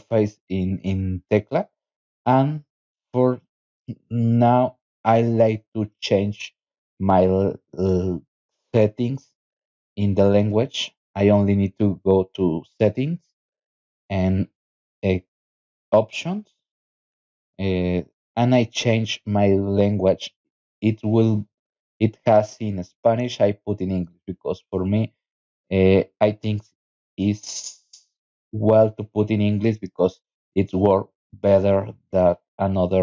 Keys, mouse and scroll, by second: 1.7 click, 3.4 click, 6.1 click, 10.2 click, 14.4 click, 15.8 click, 16.8 click, 21.5 click, 24.6 click, 25.8 click, 28.2 click, 30.9 click, 31.8 click.